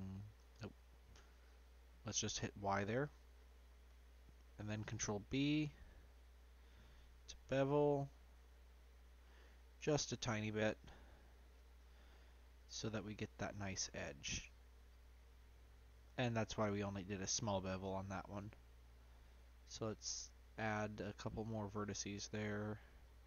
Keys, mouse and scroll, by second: 2.0 click, 3.2 scroll up 1, 3.4-5.0 middle drag, 5.0 ctrl+b, 11.1-12.7 drag, 13.1-13.6 scroll up 4, 13.6-15.0 shift+middle drag, 15.0-15.8 scroll up 2, 19.9-20.3 scroll up 1, 20.3-20.8 scroll down 1, 21.3 click, 22.1-23.2 scroll down 2.